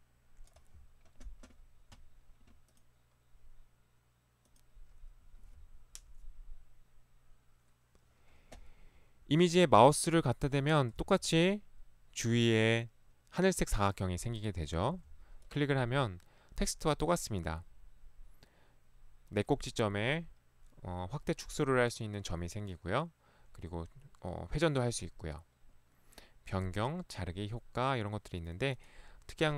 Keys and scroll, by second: 11.1 ctrl+1, 14.9 Escape, 15.0 ctrl+1.